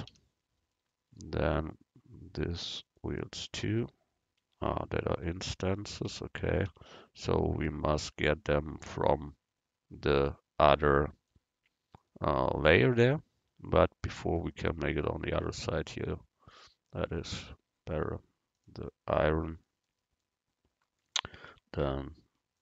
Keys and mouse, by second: 0.2 a, 3.6 Tab, 4.5 Tab, 5.2 Tab, 5.6 Tab, 6.1 Tab, 6.7 Tab, 8.1 a, 14.4-16.2 right drag, 15.1 Tab, 16.6-18.3 drag, 21.6 Tab.